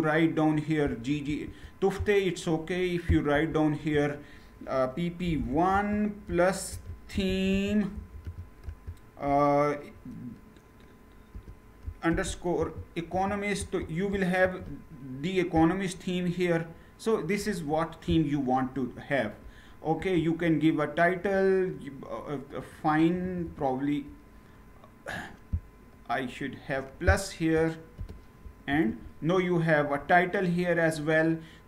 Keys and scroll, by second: 0.9 ctrl+Return, 3.0 Return, 5.0-8.0 typing, 8.3 Tab, 11.0-12.8 typing, 13.2 Tab, 14.1 ctrl+Return, 19.7 ctrl+Return, 22.6 Up, 22.9 Up, 23.1 Up, 28.4 ctrl+Return.